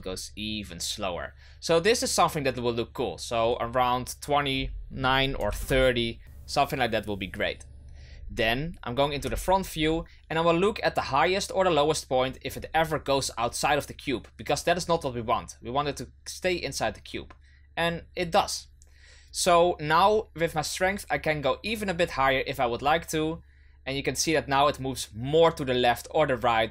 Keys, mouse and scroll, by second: 3.4-6.4 drag, 8.0 scroll down 1, 9.1 KP_1, 11.1-14.1 drag, 14.5-17.5 drag, 20.7-25.8 drag.